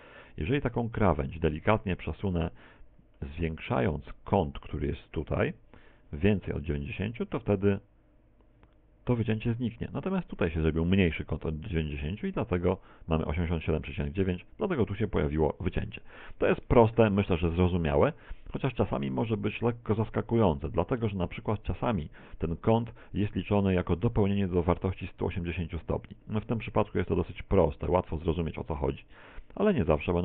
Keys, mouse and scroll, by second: 3.6 middle click, 10.6 click, 16.0 a, 16.3 a, 25.2 right click, 26.0 shift+right click, 29.7 click.